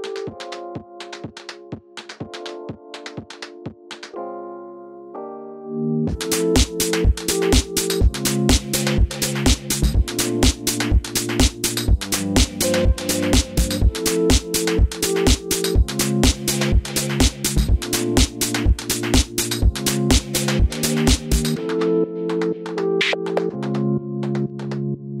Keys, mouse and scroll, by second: 0.6-3.5 scroll up 2, 3.5-4.6 scroll up 1, 4.6-5.4 scroll down 2, 5.4 click, 14.8 click, 18.7-19.4 drag, 20.4 click, 23.3-25.2 middle drag.